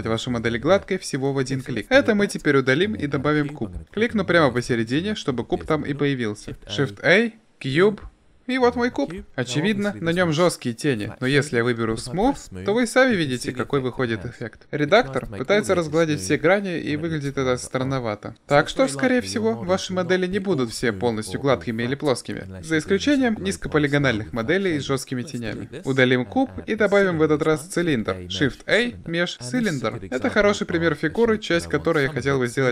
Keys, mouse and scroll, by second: 1.0 ctrl+z, 1.9 Delete, 6.4 shift+a, 12.5 click, 13.1 middle click, 13.4-13.8 drag, 13.8-14.6 middle drag, 25.7 Delete, 27.0 shift+a.